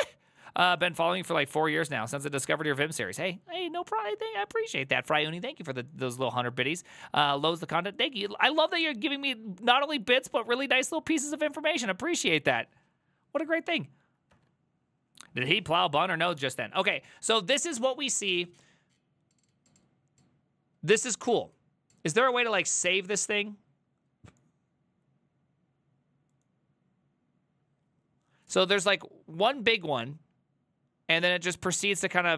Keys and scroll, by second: 14.4 alt+f, 16.2 alt+{, 17.0 alt+[.